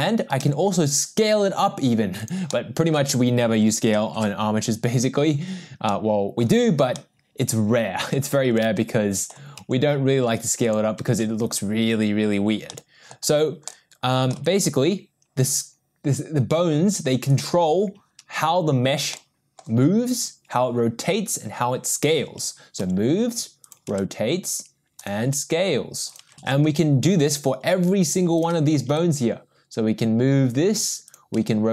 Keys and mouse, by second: 0.5 s, 2.5-3.0 middle drag, 5.1 ctrl+z, 5.9-6.4 middle drag, 6.9-9.3 middle drag, 9.6 s, 11.9 ctrl+z, 12.7 middle click, 13.7 middle click, 14.5 g, 19.2 middle click, 22.9 g, 24.0 r, 25.3 s, 27.2 ctrl+z, 29.2 g, 31.5 r.